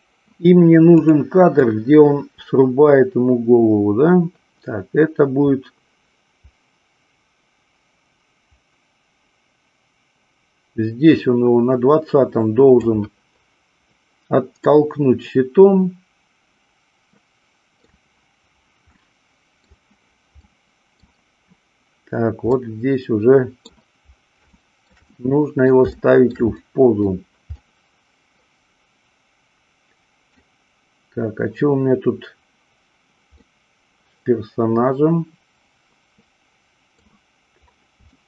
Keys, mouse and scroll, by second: 1.0 click, 1.7-12.8 drag, 14.7-17.8 middle drag, 19.0-19.7 middle drag, 20.4-21.2 middle drag, 22.4-23.7 middle drag, 24.6 shift+middle click, 25.1-25.7 middle drag, 26.0 shift+middle drag, 26.7 middle click, 27.4-30.3 middle drag, 33.4-37.1 middle drag, 38.1-38.2 shift+middle drag.